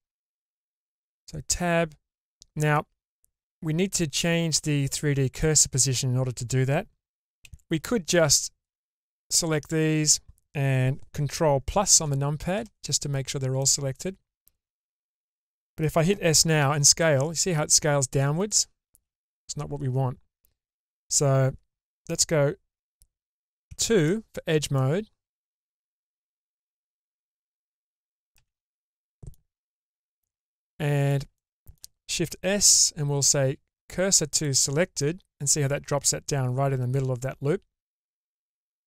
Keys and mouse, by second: 0.2 click, 0.5 Tab, 2.7-5.4 middle drag, 7.1 Tab, 7.4 alt+z, 8.7 click, 11.9 ctrl+KP_Add, 12.5 ctrl+KP_Add, 13.5-14.9 middle drag, 15.5 shift+middle click, 16.5 s, 18.9 ctrl+z, 23.6 2, 23.9 click, 24.7 middle click, 26.6 alt+click, 27.3 middle click, 28.4 alt+z, 28.7 middle click, 29.8 alt+z, 30.3 middle click, 32.5 shift+s, 34.9-37.1 middle drag.